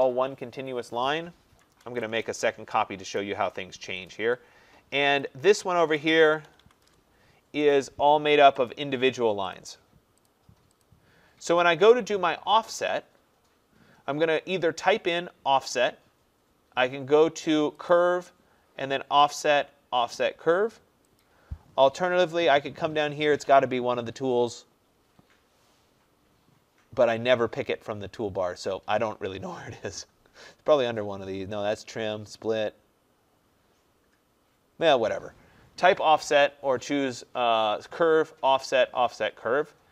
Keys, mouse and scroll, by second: 1.7-2.0 typing, 2.1 Return, 3.2 click, 3.2 typing, 4.1 click, 4.3 Escape, 5.3 click, 5.9-6.9 typing, 7.7 click, 8.7 click, 9.6 click, 10.4 click, 10.9 click, 11.7 click, 18.0 click, 21.3 click.